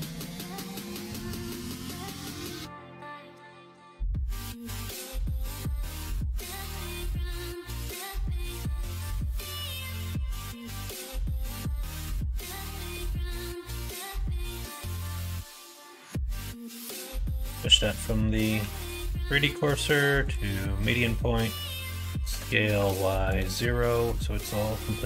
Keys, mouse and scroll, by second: 0.9 middle click, 2.7 l, 3.8 shift+n, 4.7-6.1 middle drag, 6.5 middle click, 7.2-8.7 middle drag, 10.6 middle click, 11.2 middle click, 11.6 alt+z, 12.2 click, 13.3 s, 15.8 ctrl+z, 16.6 ,, 18.5 ., 20.7 middle click, 22.1 s, 24.3 middle click.